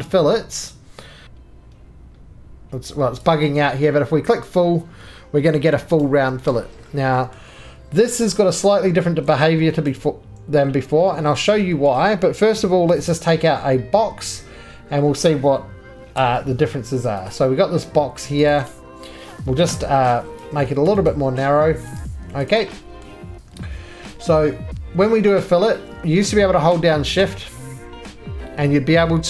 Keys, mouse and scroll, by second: 1.0 scroll up 10, 1.2 ctrl+z, 1.2 shift+click, 3.2 shift+click, 4.5 click, 5.7 middle click, 5.9 scroll down 1, 6.0 right click, 6.5 middle click, 6.6-7.4 scroll down 3, 7.4 middle click, 7.6-8.3 scroll down 4, 8.3 middle click, 8.6-9.1 scroll, 8.6 x, 9.1-9.6 scroll, 9.6 2, 10.0 click, 10.5 scroll down 9, 10.5 x, 11.4 middle click, 11.4-12.1 scroll, 11.9 shift+middle click, 13.0 click, 13.2 scroll, 14.4 click, 16.2 c, 17.3 click, 18.5 click, 18.7 right click, 19.7 s, 20.9 click, 21.1 right click, 21.4 2, 21.9 click, 22.5 shift+click, 23.0 middle click, 26.4 scroll, 28.4-29.2 middle drag.